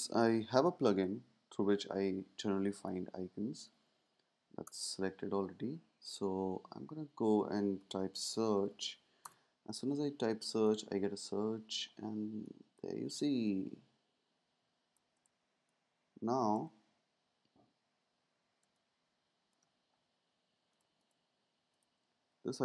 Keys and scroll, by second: 1.0 super+', 4.6 Return, 7.9-9.1 typing, 9.2 Return.